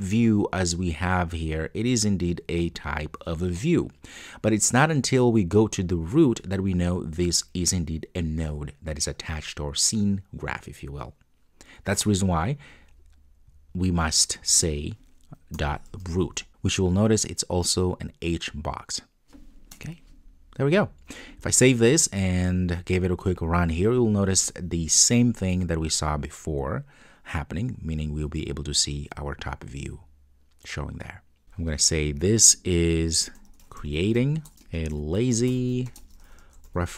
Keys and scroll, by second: 19.8 Return, 21.6 super+s, 22.6 super+F2, 23.3 ctrl+d.